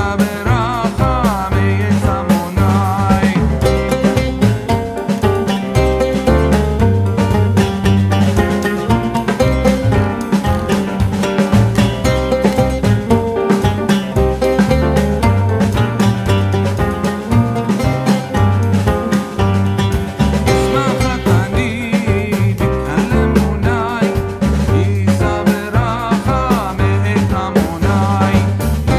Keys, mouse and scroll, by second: 1.7 click, 1.7-3.4 typing, 3.7 Return, 5.6-8.9 drag, 9.2 Up, 11.5 click, 12.5 click, 13.3 typing, 14.1 Return, 17.4-20.7 drag, 17.4 typing, 22.1 click, 22.9-24.1 typing, 23.9 click.